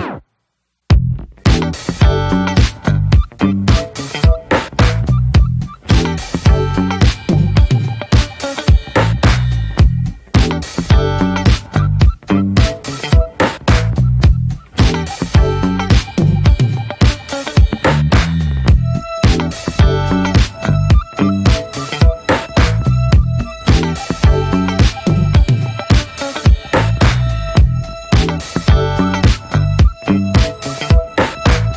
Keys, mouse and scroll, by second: 2.4 middle click, 2.8 Tab, 2.9 drag, 3.3 click, 3.7-4.1 right drag, 4.1-6.3 middle drag, 6.3 click, 6.6 click, 7.0 alt+middle drag, 7.5 Tab, 7.9 middle drag, 8.1 scroll up 1, 8.3 click, 8.5-9.0 scroll down 2, 9.0-9.6 alt+middle drag, 9.6-10.0 scroll up 1, 10.0-10.3 shift+middle drag, 10.3 e, 11.4-12.5 middle drag, 12.5 ctrl+b, 13.1-13.5 middle drag, 13.5 s, 14.4-14.8 middle drag, 14.8 ctrl+b, 17.0 scroll down 4, 17.2-17.7 middle drag, 17.7 scroll up 1, 17.9-18.3 middle drag, 18.3 drag, 18.7-19.2 alt+middle drag, 19.2-20.4 scroll up 1, 21.0 click, 22.3-23.5 shift+middle drag, 23.5 click, 24.2 ctrl+r, 30.4 click.